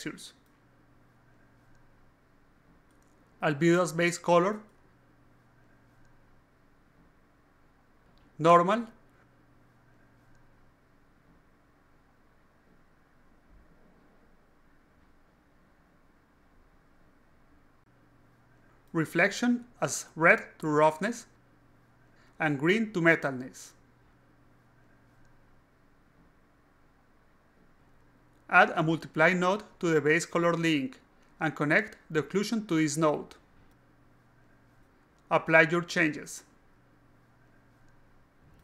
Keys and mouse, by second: 0.1 click, 2.1 click, 2.6 click, 3.7 click, 4.9-5.7 drag, 6.9-8.0 drag, 8.7 click, 10.9-12.9 drag, 13.8-14.4 drag, 15.3 click, 16.3 click, 17.1 click, 18.0 alt+click, 18.6 alt+click, 20.1-21.1 drag, 21.8-23.0 drag, 24.6 click, 24.9 click, 25.6-26.4 typing, 27.0 click, 28.5-29.4 drag, 29.6-30.1 drag, 30.4 click, 31.3-32.5 drag, 33.4 alt+click, 34.0 alt+click, 34.9 click, 38.0 click.